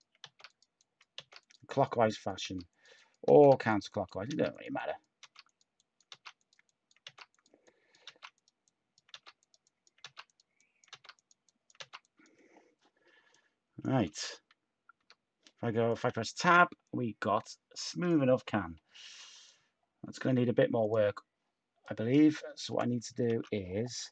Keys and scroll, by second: 0.2 z, 4.2 z, 6.0 typing, 7.0 typing, 8.0 z, 9.1 typing, 10.9-13.0 typing, 14.0-15.4 typing, 20.0 Tab, 22.6-23.7 typing.